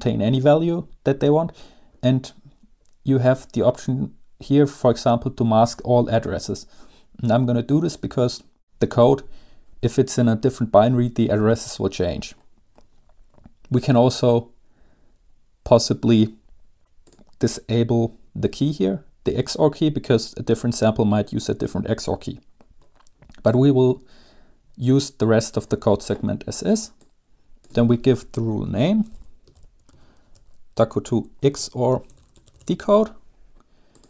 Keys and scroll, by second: 29.1-33.3 typing.